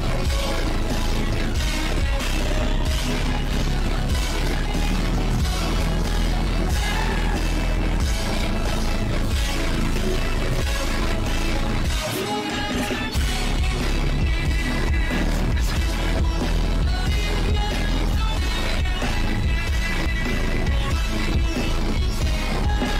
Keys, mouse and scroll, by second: 0.6 click, 0.8 click, 1.3-2.0 drag, 2.6-3.2 scroll up 3, 3.4 scroll up 1, 3.7 scroll down 1, 3.9-4.4 scroll up 1, 4.8 scroll up 1, 5.0-5.6 scroll down 4, 5.6 click, 6.5 click, 6.7-8.3 scroll up 8, 8.3 click, 8.8 click, 9.5 click, 9.7 click, 10.7 click, 11.0 click, 12.5-12.8 scroll down 2, 12.8 click, 13.2 click, 13.7 click, 15.6-15.9 scroll up 1, 15.9 click, 16.4 click, 17.4 click, 18.7 click, 19.6 click, 19.8 shift+`, 20.6 shift+`, 22.1-22.9 drag.